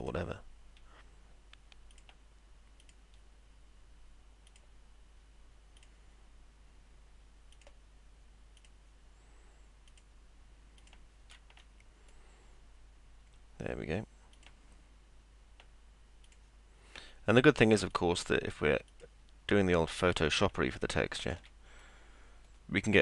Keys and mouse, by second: 0.0 ctrl+click, 1.9 ctrl+click, 2.8 ctrl+click, 4.5 ctrl+click, 5.8 ctrl+click, 7.5 ctrl+click, 8.6 ctrl+click, 9.9 ctrl+click, 10.8 ctrl+click, 11.6 middle click, 14.4 ctrl+click, 16.2 ctrl+click, 17.9 ctrl+click, 18.9 ctrl+click, 20.1 ctrl+click, 21.2 ctrl+click, 21.8 middle click.